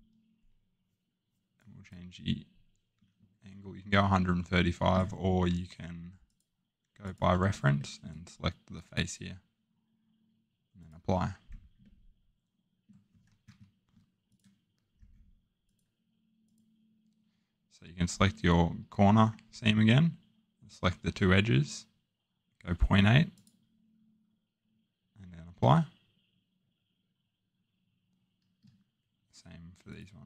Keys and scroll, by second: 13.5 Escape.